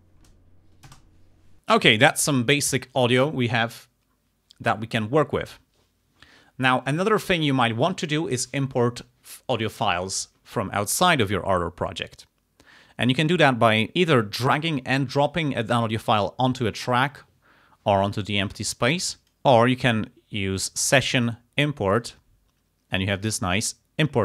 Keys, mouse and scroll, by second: 0.9 space, 19.2 click, 20.6 click, 21.9 click, 23.7 click.